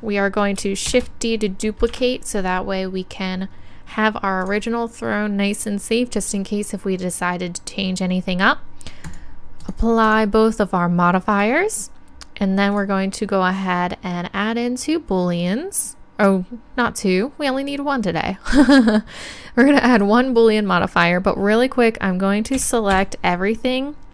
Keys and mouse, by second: 0.9 shift+d, 4.4-6.3 drag, 9.0-12.0 drag, 11.3-12.0 right drag, 12.7-14.6 drag, 12.7-14.4 right drag, 22.5 a.